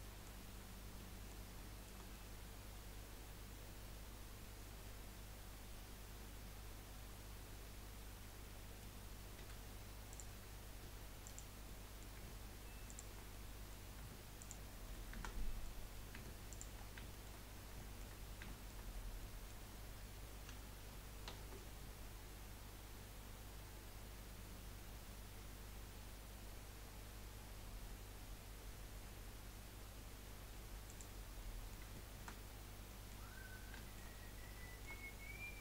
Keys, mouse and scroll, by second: 6.1-9.4 drag, 6.1-9.4 middle drag, 6.1-9.4 right drag, 9.4 2, 10.1 click, 11.2 click, 11.6-12.8 middle drag, 12.8 shift+click, 13.3-14.4 middle drag, 14.4 shift+click, 15.3 middle click, 15.8-16.5 scroll up 2, 16.5 shift+click, 16.8-17.1 scroll down 3, 17.1 shift+middle click, 17.4-17.7 scroll up 2, 17.9 shift+middle click, 18.2 scroll up 1, 18.6 shift+middle click, 18.9 scroll up 1, 19.2-21.3 middle drag, 21.3 ctrl+b, 31.4-32.5 middle drag, 32.5-32.8 scroll up 1, 32.8 middle click, 33.3-33.8 scroll up 1, 33.8 shift+middle click, 34.2 scroll up 1, 34.6-35.6 shift+middle drag.